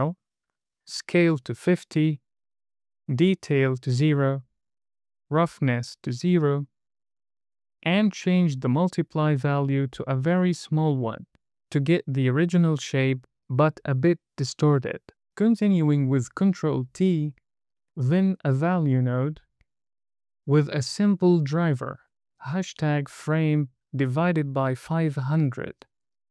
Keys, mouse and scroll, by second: 1.2-2.6 drag, 3.2-4.6 drag, 5.4-7.2 drag, 8.3-11.4 drag, 10.8 KP_0, 16.1 ctrl+t, 17.0 middle click, 17.8 click, 18.7 shift+a, 20.3 click, 20.9-26.3 drag.